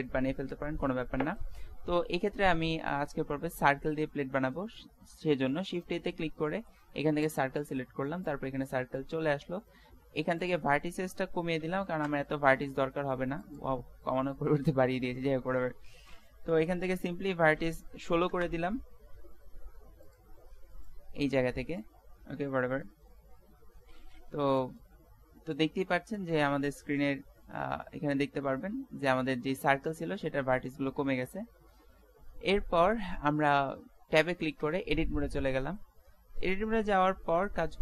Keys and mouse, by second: 4.2 shift+a, 9.0-12.2 middle drag, 13.5-15.3 drag, 34.6 Tab.